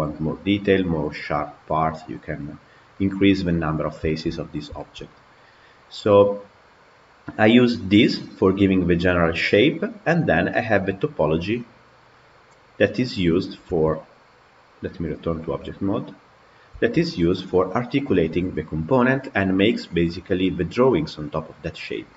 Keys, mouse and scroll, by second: 7.9-10.9 drag, 11.0 click, 11.9 click, 15.0 Tab, 15.6 click, 16.9 Tab, 19.4-22.1 middle drag.